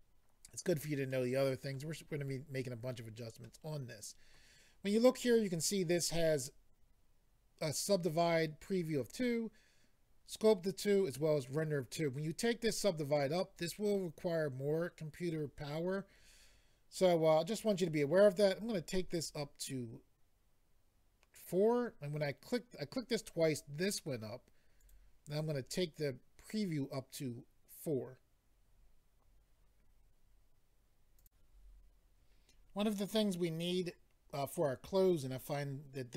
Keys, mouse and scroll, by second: 1.1 middle click, 3.4 middle click, 18.5 click, 18.6 click, 19.1 click, 19.2 click, 24.8 click, 24.9 click, 25.3 click, 25.4 double click, 31.2 click, 31.2 click.